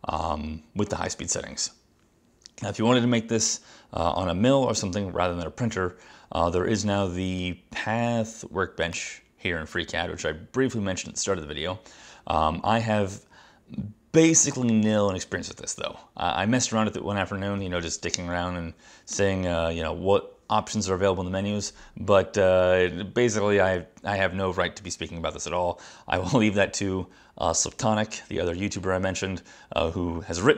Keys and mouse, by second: 6.8 click, 9.0 click, 14.3 click, 19.2 click.